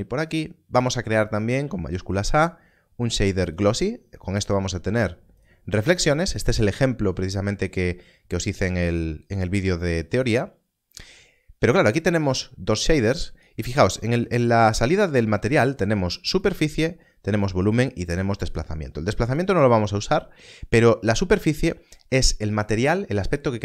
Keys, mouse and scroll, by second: 1.6 shift+a, 3.4 click, 8.9 click, 11.7 click, 16.4 click.